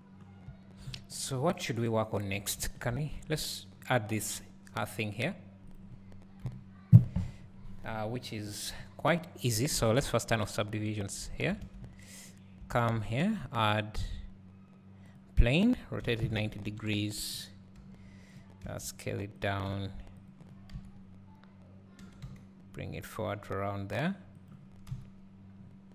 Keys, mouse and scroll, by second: 6.5 KP_1, 11.0 click, 11.6 alt+a, 12.4 click, 16.2 r, 17.4 click, 17.8 g, 18.4 click, 18.7 s, 19.5 click, 19.7 g, 20.3 click, 20.8 KP_3, 22.0 g, 24.9 KP_1, 25.6 scroll up 1.